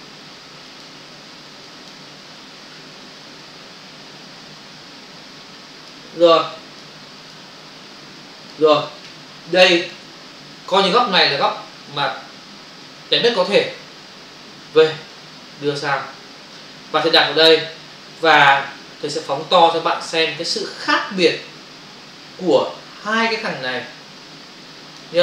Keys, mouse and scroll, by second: 1.7 click, 3.5 alt+click, 6.5 click, 7.1 click, 7.3 click, 8.2 click, 8.9 click, 9.8 click, 9.9 click, 10.5 ctrl+o, 13.0 shift+F6, 13.9 Return, 14.6 v, 15.1 click, 18.2 click.